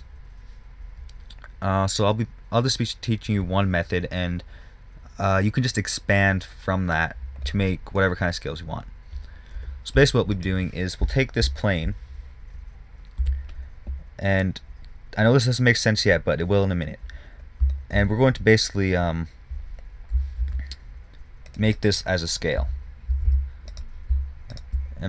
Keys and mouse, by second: 7.9-10.0 middle drag, 9.9 KP_0, 10.7 click, 13.5 Tab, 20.8 ctrl+r, 22.9 z, 23.4 z, 23.6 a, 24.2 click.